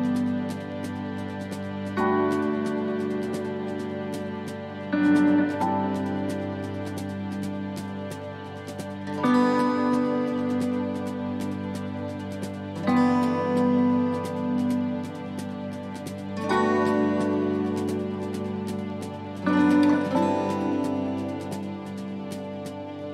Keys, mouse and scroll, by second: 1.1 click, 2.0 click, 4.0 scroll up 2, 5.1 scroll down 1, 6.2 click, 10.2 click.